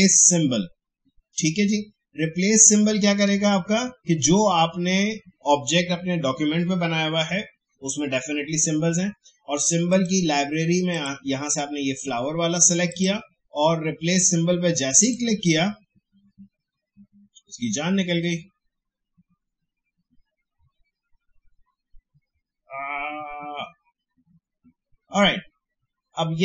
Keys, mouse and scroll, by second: 2.8 shift+scroll down 1, 9.9 click.